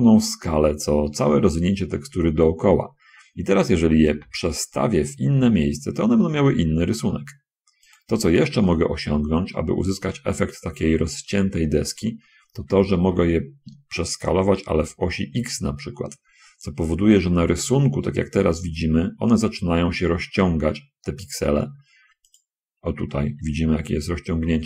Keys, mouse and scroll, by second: 1.7-3.3 middle drag, 4.4 g, 8.0 click, 9.0 shift+click, 13.3 s, 15.0 x, 22.6 click, 23.0 middle click, 24.0 shift+middle click.